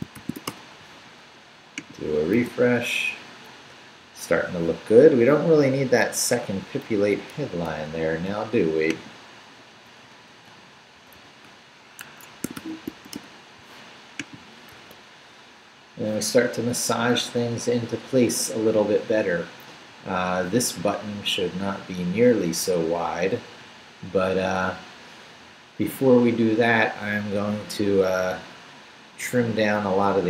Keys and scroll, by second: 0.0-0.9 typing, 2.3 super+r, 6.2 Down, 9.7 Down, 10.9 d, 12.0 Escape, 12.6 shift+;, 13.0 shift+w, 13.1 Return, 14.7 super+r.